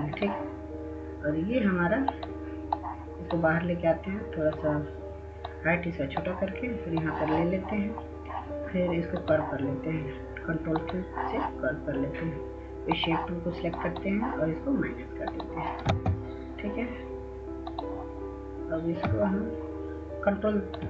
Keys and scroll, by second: 16.1 ctrl+space.